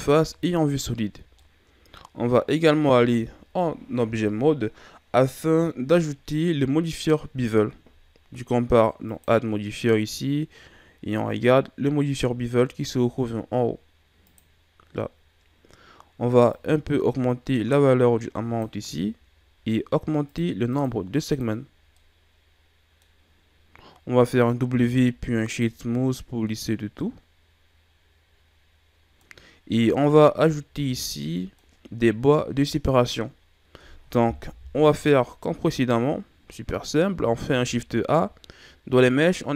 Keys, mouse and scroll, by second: 0.1 z, 1.3-2.8 middle drag, 2.8 Tab, 9.0 click, 16.5 click, 20.2 click, 21.8-24.6 middle drag, 24.6 w, 26.5-26.9 scroll down 1, 26.9-30.3 middle drag, 30.3-30.8 scroll up 2, 30.8 scroll down 4, 31.1-31.8 middle drag, 31.8-34.5 scroll up 1, 34.5 KP_1, 37.4 shift+a.